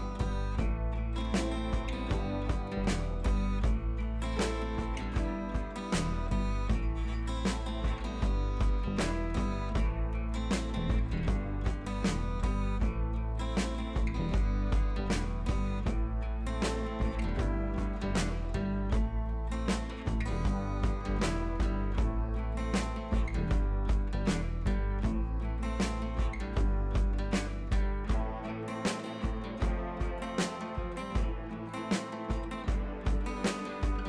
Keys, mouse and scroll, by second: 0.9 click, 10.2 scroll down 1, 10.6 click, 11.2 right click, 11.7-29.8 drag, 16.4-19.3 drag, 21.1 click, 21.5 click, 24.1 click, 24.7-30.6 drag, 31.7-34.0 drag.